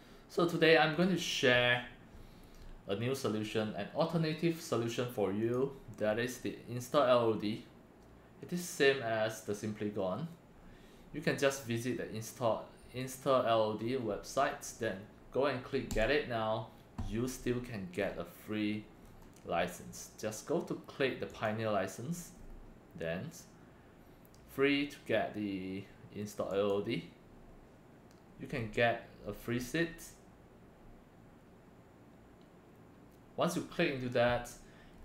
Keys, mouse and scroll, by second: 5.5 click, 10.3 scroll up 1, 15.9 click, 17.9 scroll down 2, 19.0 scroll down 1, 19.1 scroll up 1, 21.3 click, 22.3 scroll down 2, 26.5 click, 28.5 scroll down 1, 34.9 scroll down 1.